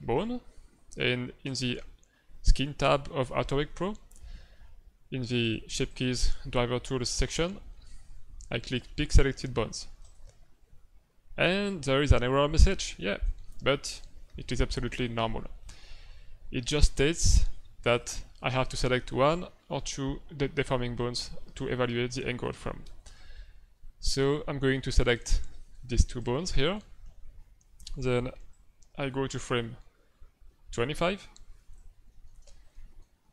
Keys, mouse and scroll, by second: 1.4 click, 5.4 click, 5.8 click, 10.0 click, 17.8 click, 25.0 right click, 26.3 shift+right click, 26.5 middle click, 28.5 click, 32.0 middle click, 32.7 ctrl+middle click, 33.2 middle click.